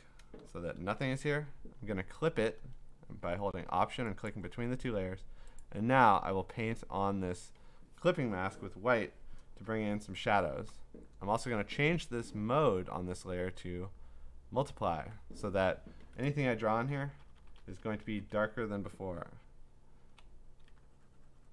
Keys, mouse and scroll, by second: 0.4 ctrl+i, 4.3 alt+click, 5.6 click, 8.4 click, 10.6 click, 10.7 click, 11.8 click, 12.9 click, 14.0 click, 14.9 click, 16.7-18.3 typing, 20.2 ].